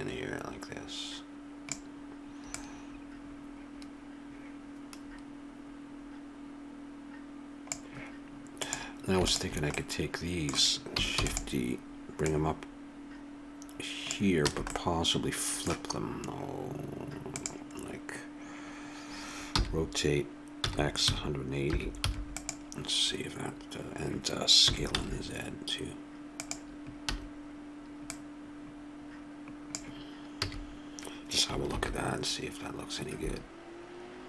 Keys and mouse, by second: 2.5-7.0 drag, 8.6 click, 9.8-11.2 middle drag, 11.2 shift+d, 11.7-14.4 drag, 14.5 a, 19.6 r, 24.7 s, 28.0 click, 30.5 a, 31.7 shift+z.